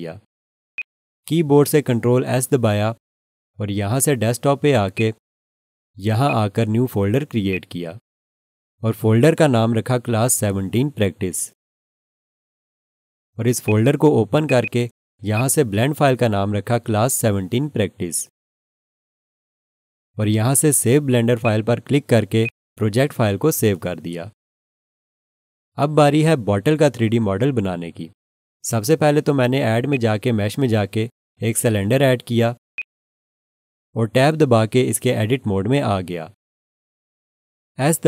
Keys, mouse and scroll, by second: 0.7 alt+shift+click, 3.1 ctrl+s, 4.9 click, 6.3 right click, 7.5 click, 8.7-12.9 typing, 13.6 click, 14.6 double click, 15.3 click, 15.9-19.9 typing, 21.4 click, 29.9 click, 35.4 Tab.